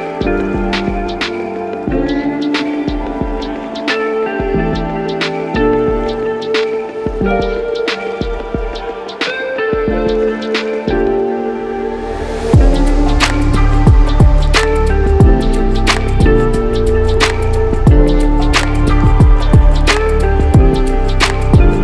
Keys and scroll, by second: 0.0 ctrl+-, 0.1 ctrl+-, 0.2 ctrl+-, 4.3 F9, 13.4 ctrl+-, 16.6 ctrl+-.